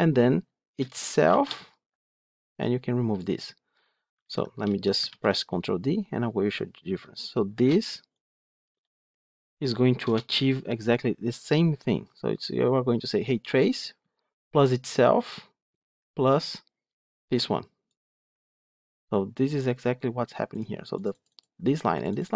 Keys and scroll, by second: 4.1 ctrl+z, 4.9 ctrl+d.